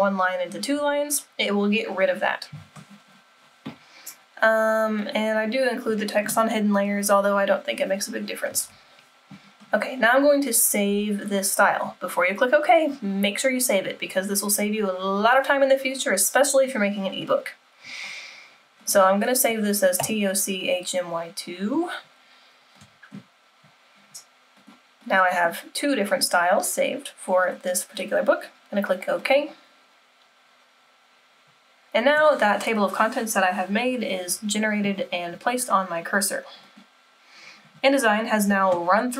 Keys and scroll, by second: 8.7 super+-.